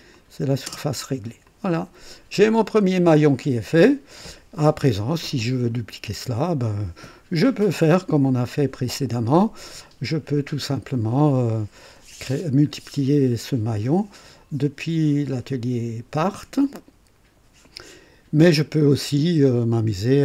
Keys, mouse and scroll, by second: 0.1 click, 0.7 space, 1.4-6.9 drag.